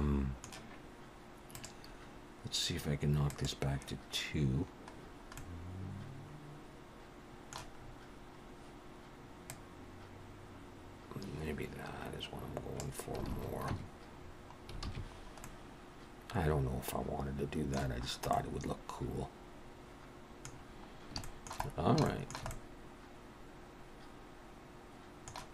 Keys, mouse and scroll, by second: 1.6 click, 3.3 click, 5.0-5.7 scroll down 3, 5.3 middle click, 7.7-9.0 scroll up 5, 9.5 click, 13.3 alt+a, 13.7 Tab, 14.2-15.4 scroll down 6, 14.8 alt+a, 15.4 middle click, 18.0 scroll up 3, 18.3 middle click, 20.5-20.9 scroll down 4, 21.2 shift+middle click, 21.7 scroll down 1, 22.0 shift+middle click, 22.5 middle click.